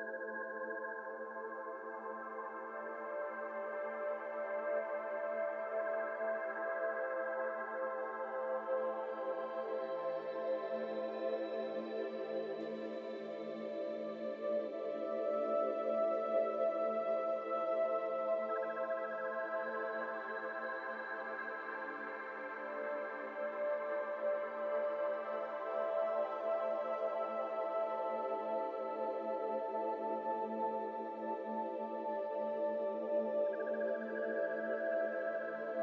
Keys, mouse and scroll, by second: 0.8 shift+middle click, 1.0 scroll up 1, 1.2-2.1 s, 4.2 Tab, 4.3 scroll down 1, 4.4-6.4 middle drag, 6.4 Tab, 6.9 2, 7.3 alt+click, 7.9 alt+shift+click, 9.0 alt+shift+click, 9.4 middle click, 10.1 alt+z, 10.3 middle click, 10.7 alt+z, 11.4 ctrl+b, 13.9 middle click, 14.6-15.5 scroll down 2, 14.7 middle click, 15.5 Tab, 15.9 ctrl+1, 16.2 ctrl+2, 16.4 middle drag, 16.7 scroll up 2, 16.9 Tab, 17.0 middle click, 17.2 scroll up 2, 17.4 3, 17.7 click, 18.0 shift+click, 19.5-20.6 scroll down 1, 20.8 x, 21.4 x, 22.0 Tab, 22.1 scroll down 1, 22.3 middle click, 22.7 scroll down 1, 22.8 middle drag, 23.0 scroll up 2, 23.1 Tab, 23.6 middle click, 24.3 scroll up 1, 24.4 2, 24.9 alt+click, 25.4 shift+middle click, 25.8 f, 26.0 shift+middle click, 26.3-27.0 scroll up 1, 27.0 i, 28.4 ctrl+z, 29.7 e, 32.2 f, 32.6-33.7 middle drag, 33.7 alt+z, 34.2 alt+z, 34.6 i.